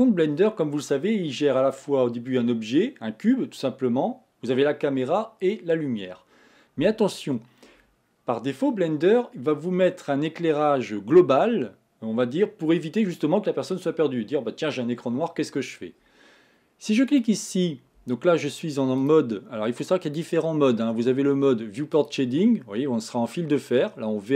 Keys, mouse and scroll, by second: 17.4-19.3 drag, 22.0 click.